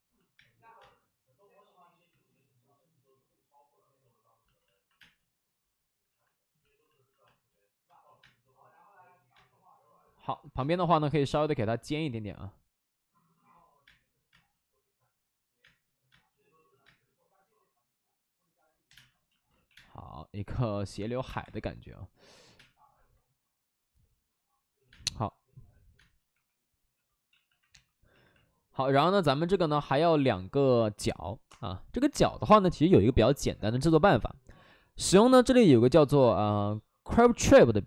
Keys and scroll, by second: 0.3 space, 0.7 space, 2.0 ctrl+z, 4.6 alt+f, 4.9 space, 6.0 alt+f, 7.2 space, 7.8 space, 8.1 space, 9.3 space, 10.5 space, 14.2 space, 15.5 space, 18.8 2, 18.8 space, 19.4 x, 19.7 space, 21.1 3, 21.2 space, 21.3 3, 22.4 3, 22.4 space, 24.8 space, 25.9 space, 26.2 3, 27.2 ctrl+z, 27.4 ctrl+z, 27.6 2.